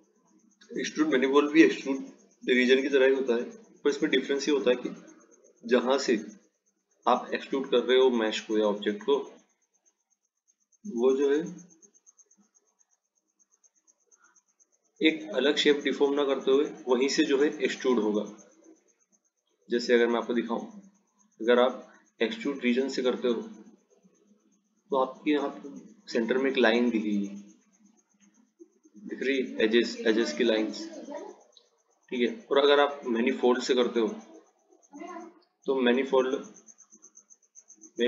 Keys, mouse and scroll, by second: 0.4 click, 6.1-8.4 drag, 9.5 click, 12.6 click, 14.9 click, 21.2-24.4 drag, 33.6-36.3 drag, 36.3-37.0 scroll up 2, 37.0-38.0 scroll down 4.